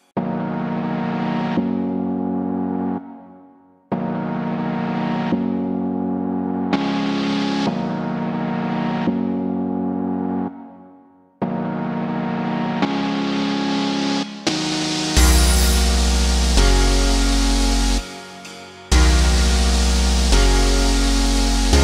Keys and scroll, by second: 15.9 Escape.